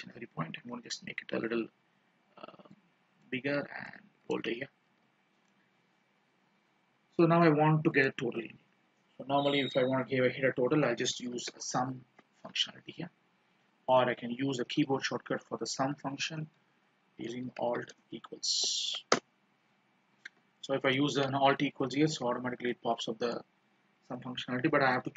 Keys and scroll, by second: 4.5 ctrl+b, 20.8 ctrl+b, 23.4 alt+=.